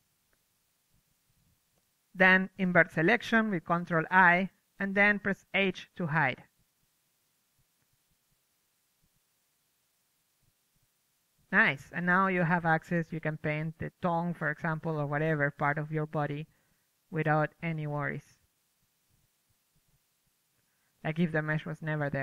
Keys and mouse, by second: 0.4 ctrl+i, 1.1 z, 2.2-3.6 typing, 4.6 right click, 5.0 ctrl+i, 5.7 h, 6.2 Tab, 6.9-8.1 drag, 7.8 Tab, 8.1 a, 8.2 a, 8.4 l, 8.7 Tab, 9.0 click, 9.9 middle drag, 10.0 click, 11.1 middle click, 11.3-12.3 drag, 12.9 middle click, 13.5-15.7 drag, 15.0 KP_3, 15.7 middle click, 16.3-22.2 drag, 19.2 f.